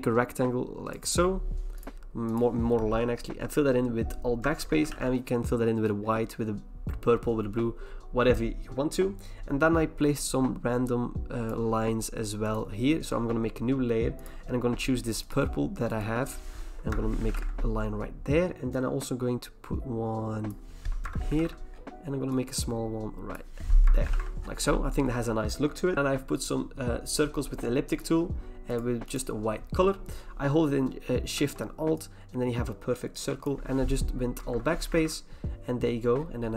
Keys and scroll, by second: 4.4 alt+BackSpace, 4.9 ctrl+d, 16.9 alt+BackSpace, 17.3 ctrl+d, 21.0 alt+BackSpace, 21.4 ctrl+d, 23.8 alt+BackSpace, 24.1 ctrl+d, 34.5 alt+BackSpace, 35.0 ctrl+d.